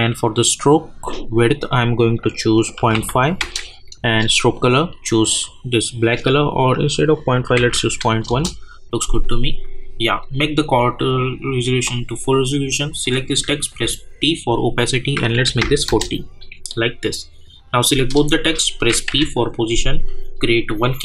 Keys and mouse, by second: 2.5 click, 3.4 \, 3.7 Return, 4.5 click, 8.3 Return, 9.0 click, 13.0 click, 15.8 Return, 16.6 click, 19.1 p, 20.6 click.